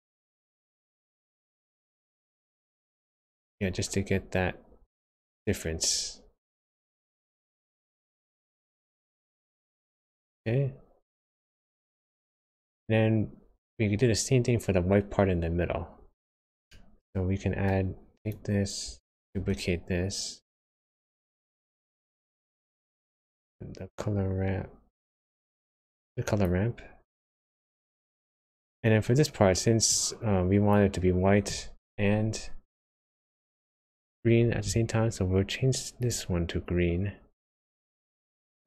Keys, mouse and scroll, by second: 2.1-2.6 scroll up 4, 2.7 shift+middle click, 7.2 click, 12.7-13.5 scroll down 4, 13.6-15.6 scroll down 3, 15.6-16.0 scroll up 3, 16.0-16.7 scroll down 1, 16.7 middle click, 18.1 click, 19.3 shift+d, 21.5 middle click, 23.3 click, 27.2-27.8 scroll down 7, 28.1 middle click, 28.8-29.5 scroll up 1, 29.8 click, 36.0 click, 37.6 click.